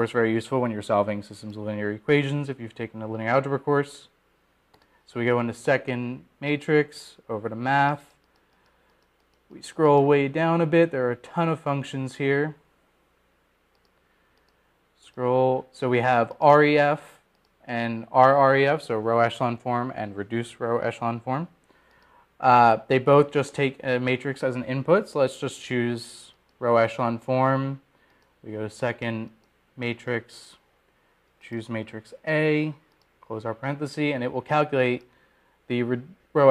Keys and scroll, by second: 9.2 Right, 10.7 Down, 11.2 Down, 11.8 Down, 12.5 Down, 13.1 Down, 14.8 Down, 17.1 Down, 17.8 Down, 19.3 Up, 20.3 Down, 24.9 Up, 29.2 Return, 29.5-30.2 typing, 34.1 Return, 35.7 ).